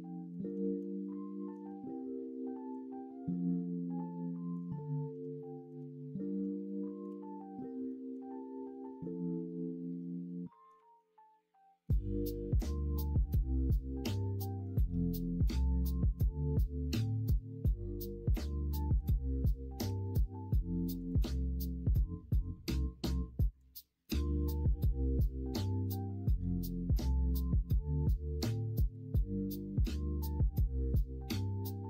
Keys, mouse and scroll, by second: 0.3 middle click, 0.6 alt+z, 1.0 middle click, 3.6-5.2 drag, 5.4 shift+middle click, 6.6-7.0 scroll up 1, 7.0 scroll down 1, 7.8 scroll up 1, 8.1 scroll down 1, 8.8-10.4 scroll up 1, 10.4 scroll up 1, 10.7 middle click, 10.7 scroll down 1, 10.8 alt+z, 11.8-13.9 middle drag, 11.8-12.8 scroll up 1, 12.8-13.3 scroll up 1, 13.3-13.9 scroll down 1, 14.4 middle click, 14.4 scroll up 1, 18.6 middle click, 18.6-19.0 scroll up 1, 19.8 e, 21.2 alt+z, 21.7 middle click, 22.8-24.0 drag, 24.0 middle click, 24.2 scroll down 1, 25.6 scroll up 1, 25.7 middle click, 27.7-28.9 middle drag, 28.9 scroll down 1, 29.9 middle click.